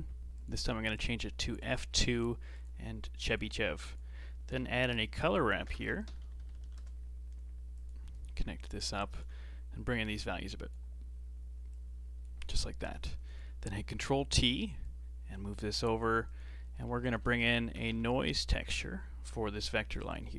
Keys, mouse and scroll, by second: 0.9-1.9 drag, 1.9 scroll up 5, 2.5-3.7 drag, 3.7 shift+a, 5.7 BackSpace, 6.5 r, 8.1-10.2 alt+right drag, 10.2-12.5 drag, 12.5 middle click, 13.2 click, 13.9 ctrl+t, 14.2 middle click, 14.8 click, 15.7 g, 16.5 middle click, 16.8 shift+a.